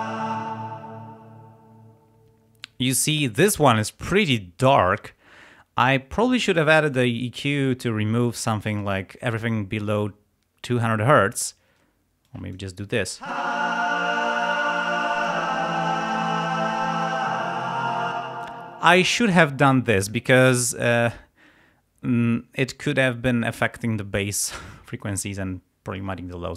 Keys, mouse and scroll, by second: 0.4 space, 12.3 click, 13.1 space, 15.0 click, 16.8 click, 18.2 space.